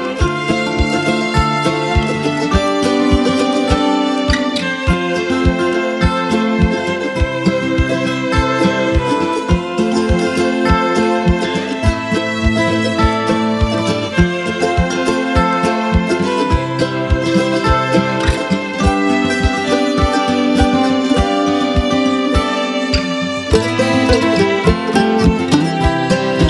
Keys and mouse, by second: 0.0-0.3 typing, 0.7-1.6 click, 1.6 space, 1.7-2.3 click, 2.1 space, 2.3-3.8 click, 3.1 space, 3.2 click, 3.6 space, 3.9-7.8 drag, 5.2 space, 5.4 click, 5.8 space, 6.0 click, 7.6 space, 7.7 click, 8.1 space, 8.3-9.5 click, 9.4 space, 9.6 click, 9.9-10.3 space, 10.7-11.3 click, 11.9 space, 12.3 click, 12.7 space, 12.8-15.0 drag, 15.0 space, 15.2-15.8 click, 15.6 space, 16.0-19.1 drag, 19.2 space, 19.3 click, 19.7 space, 23.8 click.